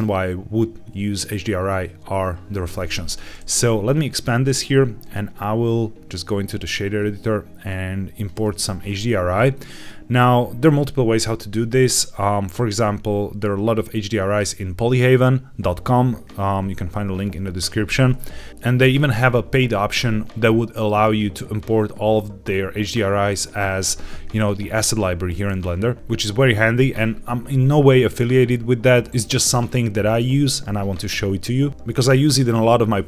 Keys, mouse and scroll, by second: 3.8 click, 4.9-6.6 drag, 7.6 click, 8.7-9.4 scroll up 2, 9.4 middle click, 9.4-9.8 scroll up 2, 18.5 middle click.